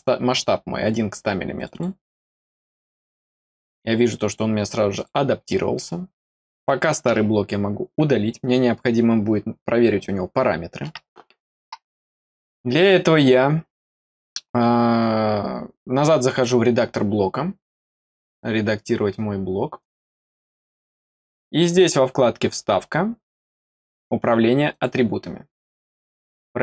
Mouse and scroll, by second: 1.5 click, 1.6 click, 2.5 scroll down 1, 3.0 click, 3.3-4.1 scroll down 3, 4.9 click, 6.4 click, 16.2 click, 17.6 click, 18.1 click, 19.7 click, 19.9 click, 21.7 click, 24.6 click.